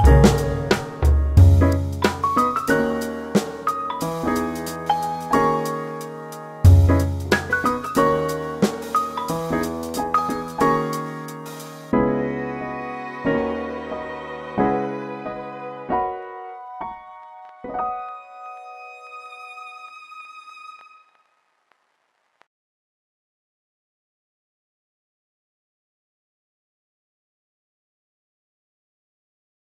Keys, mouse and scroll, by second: 0.2 q, 1.0 middle click, 1.9 click, 6.2 double click, 6.9 click, 11.4 double click, 12.7 click, 12.9 double click.